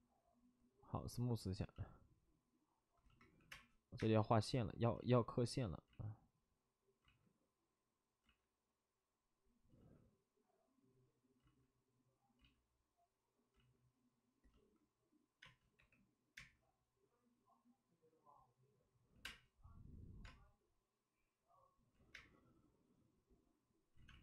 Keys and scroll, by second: 1.6 space, 3.3 5, 3.4 space, 3.9 space, 5.8 ctrl+z, 9.7 ctrl+z, 11.4 ctrl+z, 12.3 ctrl+z, 13.5 ctrl+z, 15.4 space, 15.7 3, 16.3 space, 19.0 5, 19.2 space, 21.9 ctrl+z, 22.1 space, 23.9 ctrl+z, 24.0 space.